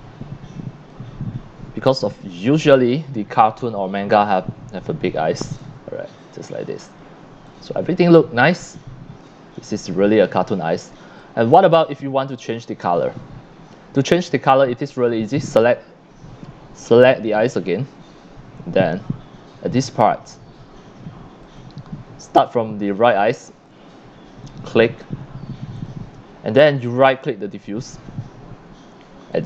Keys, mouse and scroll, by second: 2.5 scroll down 1, 2.8-3.8 drag, 3.3 c, 5.4-5.7 scroll up 2, 7.4-9.2 drag, 7.5 x, 7.8 c, 9.5-9.9 scroll up 2, 10.3 scroll down 1, 11.1 c, 11.2-11.5 drag, 12.2 click, 14.1 click, 16.7 click, 17.5 click, 21.1 click, 22.8 x, 23.0 click, 25.8 click, 27.1 right click, 29.3 click.